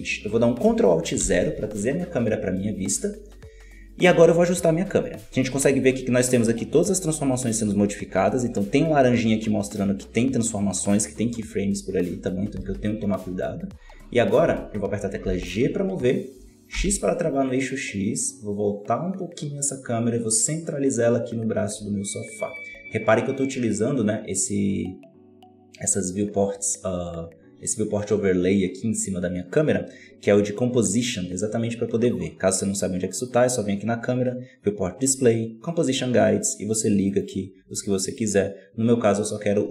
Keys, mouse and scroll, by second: 1.1 ctrl+alt+KP_0, 12.5 g, 15.1 g, 33.1 click, 34.7 scroll down 3, 35.6 scroll down 4, 36.9 click, 37.1 click, 37.7 click, 38.0 click.